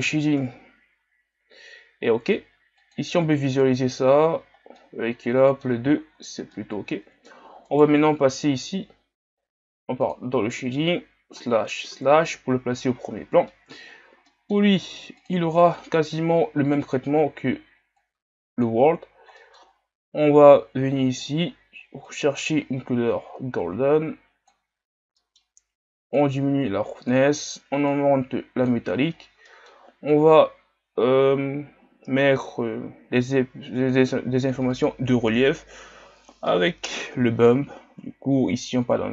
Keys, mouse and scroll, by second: 0.4 KP_Divide, 3.0 click, 4.2 scroll down 4, 4.7-5.9 middle drag, 5.9 shift+scroll down 6, 6.6-7.8 middle drag, 7.8-10.3 right drag, 10.3-12.2 drag, 12.2 KP_Divide, 13.0 scroll down 3, 13.5-15.3 middle drag, 15.3-22.1 drag, 26.2-39.1 drag.